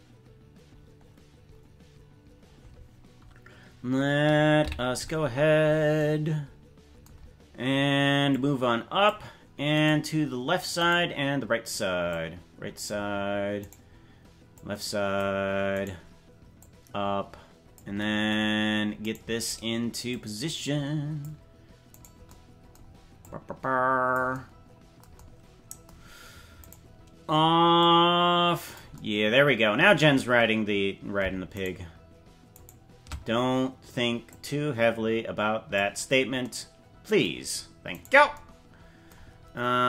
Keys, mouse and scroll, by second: 4.6 KP_Decimal, 5.3-6.0 scroll down 9, 8.3 click, 9.9 right click, 10.9 right click, 12.1 click, 13.9 right click, 14.5 click, 15.8 right click, 16.6-17.8 drag, 19.2 right click, 20.1-21.2 drag, 22.0 right click, 23.2 click, 26.8 right click, 27.8-28.8 drag, 31.6 shift+right click, 32.6 shift+right click, 34.2-35.8 drag, 38.0 right click.